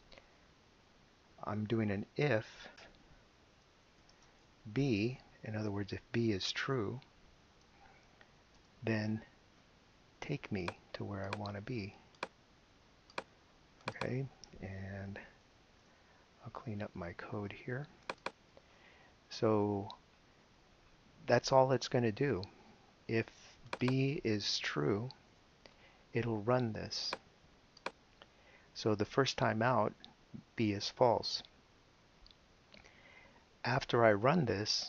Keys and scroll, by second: 2.0-5.1 typing, 4.9 shift+Left, 5.5 Right, 7.3 shift+[, 8.5 shift+Return, 15.1 BackSpace, 25.2 BackSpace.